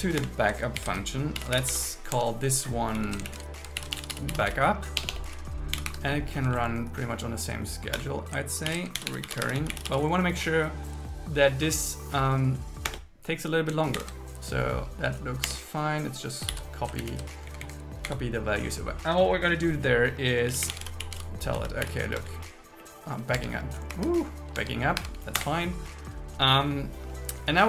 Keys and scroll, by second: 0.2 Return, 0.8 alt+l, 1.4 shift+j, 2.2 Tab, 2.9 Right, 3.3 alt+shift+Left, 3.8 shift+b, 5.0 BackSpace, 5.9 Escape, 6.4 Right, 8.0 Return, 8.7 alt+l, 9.0 shift+r, 12.9 Return, 14.0 shift+8, 15.5 Tab, 16.6 super+s, 17.0 super+Left, 17.5 Down, 18.3 End, 22.2 Return, 24.0 Escape, 24.6 Tab, 25.4 Return.